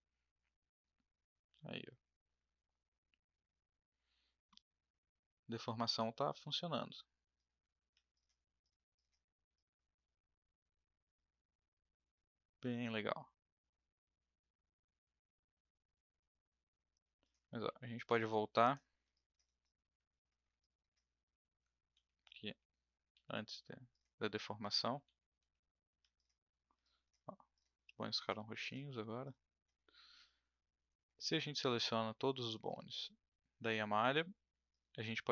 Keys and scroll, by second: 7.8 ctrl+z, 17.5 ctrl+z, 18.0 ctrl+z, 21.9 ctrl+z, 22.4 ctrl+z, 23.1 ctrl+z, 24.8 ctrl+z, 25.0 ctrl+z, 25.4 ctrl+z.